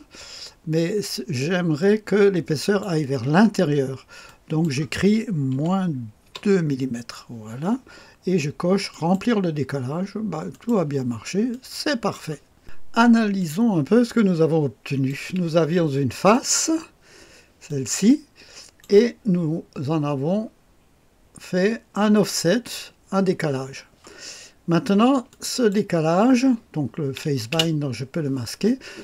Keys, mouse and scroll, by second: 1.8-3.0 drag, 4.3 click, 5.6 -, 6.3 KP_2, 8.9 click, 10.5-13.3 drag, 13.4-15.1 drag, 16.3 click, 17.7-18.9 drag, 19.5-20.2 scroll up 1, 20.2-21.5 scroll up 1, 24.3-25.3 scroll down 1, 25.3 click, 27.5 space.